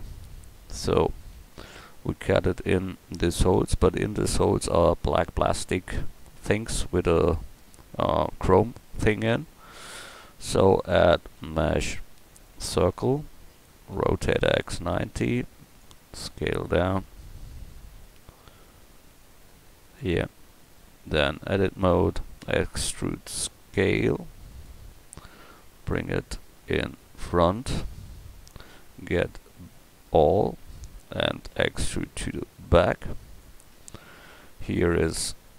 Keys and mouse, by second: 0.4 KP_1, 1.5 middle click, 2.2 middle click, 4.7-9.4 middle drag, 13.9 r, 16.2 s, 20.2 middle click, 21.2 Tab, 22.4 e, 25.6 Tab, 27.6 click, 28.1 click, 28.9 a, 29.2 a, 29.8 Tab, 30.4 a, 30.6 a, 31.5 e, 33.7 Tab.